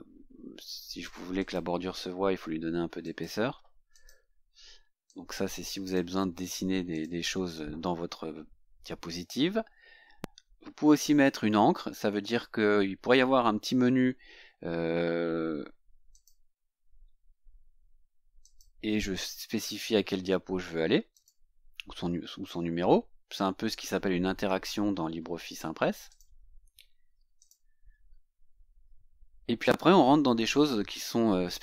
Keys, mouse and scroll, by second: 1.5 click, 3.1 click, 4.0 click, 5.2 click, 7.0 click, 16.2 click, 18.5 click, 21.3 click, 26.2 click, 27.5 click.